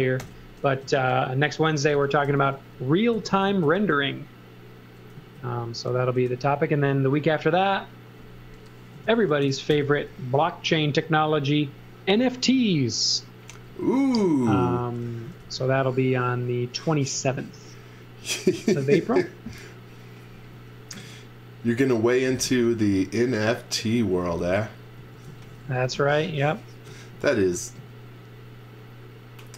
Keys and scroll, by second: 0.2 shift+g, 0.7 Return, 1.4-3.1 typing, 6.2 s, 8.7-9.6 typing, 13.6 space, 14.1 z, 15.0 x, 15.3 v, 20.3 x, 21.8-22.8 typing, 24.7-27.3 typing.